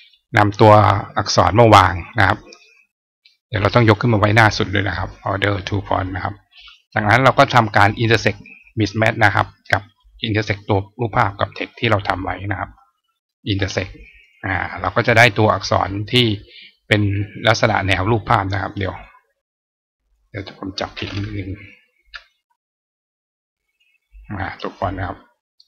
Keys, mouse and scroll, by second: 3.6 right click, 4.9 click, 5.7 click, 8.1 click, 9.8 click, 12.2 shift+click, 14.0 click, 14.7 click, 15.6 click, 17.5 click, 18.7 click, 19.9 click, 23.5 click, 24.7-25.6 drag.